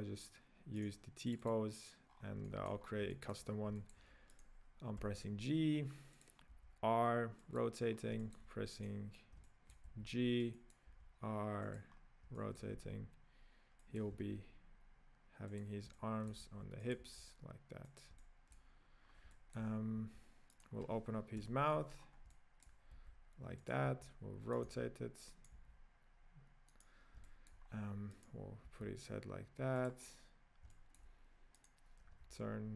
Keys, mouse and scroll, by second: 0.0 click, 1.0 right click, 1.3 click, 2.1-2.5 scroll down 7, 2.5 shift+middle click, 2.8-3.1 scroll up 3, 3.1-3.5 middle drag, 3.5 scroll down 3, 3.8-4.5 shift+middle drag, 4.5 right click, 5.1 g, 6.7 r, 7.9-8.2 scroll down 4, 8.2-9.0 shift+middle drag, 9.0 right click, 9.5-10.0 shift+middle drag, 10.0 g, 11.0 r, 12.0-12.4 scroll up 4, 12.4 middle click, 12.8 g, 14.3 r, 15.9-16.6 middle drag, 16.6 g, 17.2 r, 18.2-19.1 middle drag, 19.1 scroll down 1, 19.3-20.7 middle drag, 20.7-21.4 right drag, 21.4 KP_Decimal, 22.0 scroll down 5, 22.3-23.1 middle drag, 23.1 g, 24.0 r, 24.9 r, 25.7 g, 27.3-27.7 shift+middle drag, 27.7-28.3 scroll down 2, 28.3 right click, 28.8 r, 30.0-30.7 scroll down 3, 30.7-31.7 shift+middle drag, 31.7-32.2 right drag, 32.2 r.